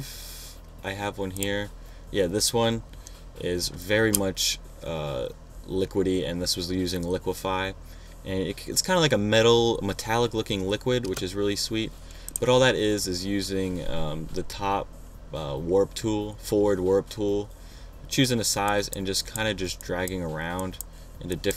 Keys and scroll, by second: 4.4 space.